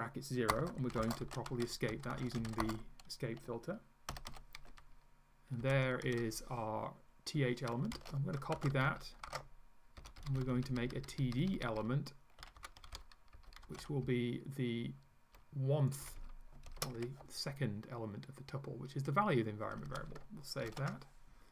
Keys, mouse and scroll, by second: 0.5-3.0 typing, 4.1 shift+], 5.6 Home, 7.9 shift+Down, 8.7 ctrl+Down, 8.9 ctrl+Up, 9.3 ctrl+v, 10.0 Up, 10.2 Right, 12.4 d, 12.6 Delete, 12.9 End, 13.0 Left, 13.7 Delete, 13.8 d, 14.0 Left, 16.1 Right, 17.0 shift+1, 19.7 Home, 20.7 ctrl+s.